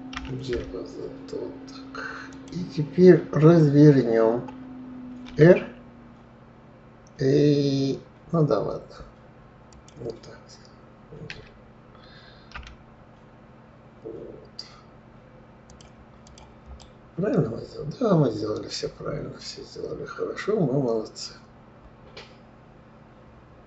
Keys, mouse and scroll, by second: 0.5 g, 5.6 r, 11.6 d, 16.6 click, 17.1-20.1 middle drag.